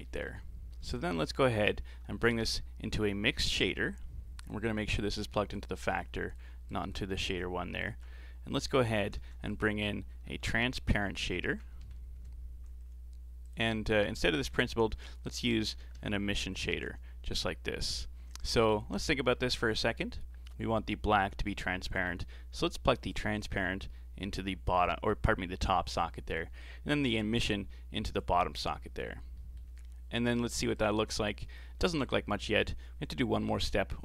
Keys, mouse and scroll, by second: 0.0-0.8 middle drag, 0.8 shift+a, 5.6 click, 6.7 click, 7.9 ctrl+shift+click, 8.3 scroll down 2, 8.5 middle click, 9.2 shift+a, 14.3 click, 14.5 x, 14.9 shift+a, 18.7 ctrl+shift+click, 19.8-22.9 scroll up 4, 23.1 click, 27.2 click, 29.1 scroll up 3, 29.3 middle click, 29.8-30.8 scroll down 4, 30.8 ctrl+shift+Left.